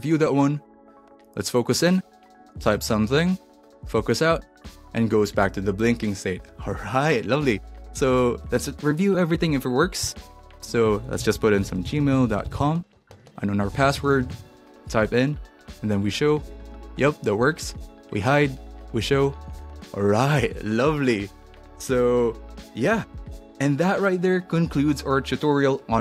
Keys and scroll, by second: 2.2-4.1 typing, 11.0-13.0 typing.